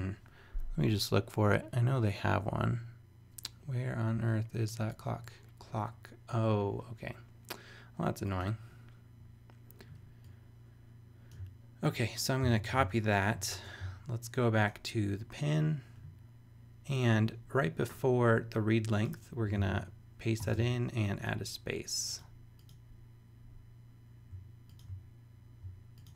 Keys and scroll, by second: 12.4 super+c, 12.7 super+Tab, 19.5 super+v, 20.4 super+space.